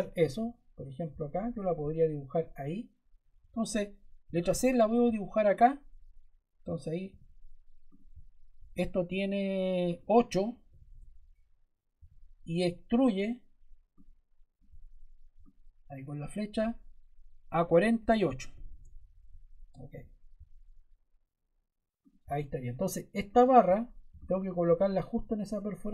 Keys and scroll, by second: 4.1 c, 7.0 d, 10.6 8, 10.8 Return, 11.9 e, 18.0 4, 18.4 8, 18.6 Return.